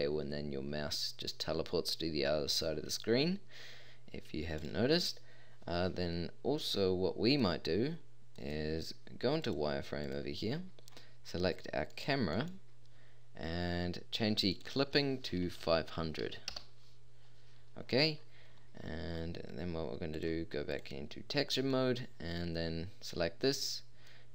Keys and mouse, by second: 4.9-5.7 middle drag, 6.8 middle click, 7.0 middle click, 7.2 middle click, 11.3-14.5 middle drag, 17.5-17.8 middle drag, 22.6-23.4 middle drag, 24.2 middle click.